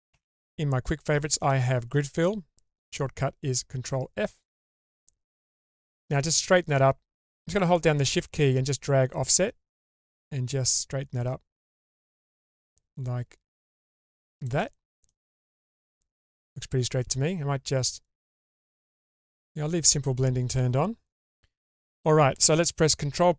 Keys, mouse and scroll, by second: 0.1 q, 9.2-14.6 shift+drag, 15.0-16.2 middle drag, 18.4 click, 19.3 click.